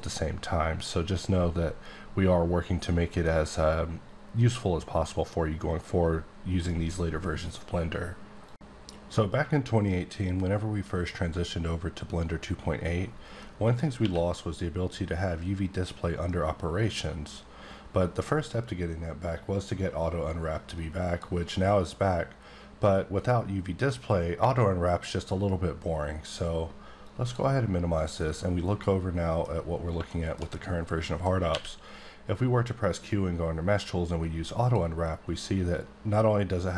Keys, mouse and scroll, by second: 15.1 q, 20.8 click, 28.8 middle click, 29.5 scroll up 2, 30.1 shift+middle click, 31.5 q, 34.5 click.